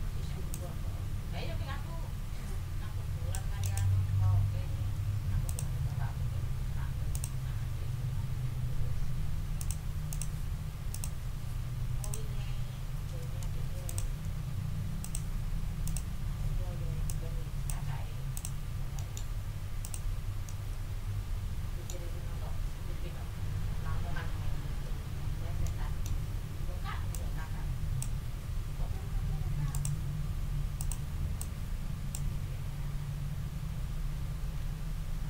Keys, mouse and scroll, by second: 0.0 ctrl+d, 0.5-3.5 ctrl+drag, 3.6 ctrl+click, 4.9 ctrl+scroll up 2, 7.1 click, 9.6 click, 10.1 click, 10.9 click, 12.0 click, 13.0 d, 13.8 shift+click, 15.0 click, 15.8 click, 17.0 click, 18.3 click, 18.9 middle click, 19.1 ctrl+click, 19.3 ctrl+scroll up 2, 19.8 ctrl+middle click, 20.4 scroll up 2, 20.6-22.0 middle drag, 25.2 ctrl+scroll down 2, 25.6 ctrl+middle click, 26.3 ctrl+scroll up 2, 27.1-28.2 ctrl+middle drag, 28.7 ctrl+z, 30.2 ctrl+scroll up 2, 30.8 ctrl+middle click, 31.4 ctrl+middle click, 34.4 ctrl+z, 34.9-35.2 ctrl+scroll down 2.